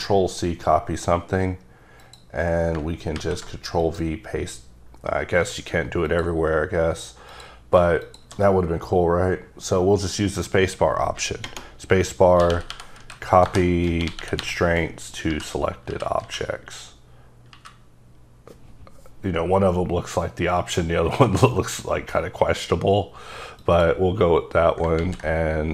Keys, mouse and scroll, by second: 2.0 click, 3.1 ctrl+v, 3.8 click, 6.1 click, 7.4 click, 12.4-14.4 typing, 13.8 Return, 15.3 Down, 15.9 Up, 16.2 Down, 17.5 Up, 25.0 z.